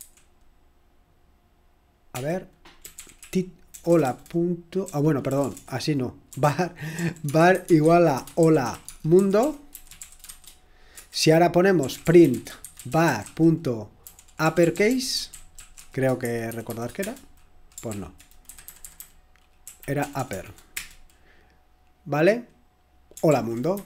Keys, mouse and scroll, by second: 0.0 typing, 2.7-21.2 typing, 17.9 Return, 18.9 Left, 19.6 Left, 23.0-23.8 typing.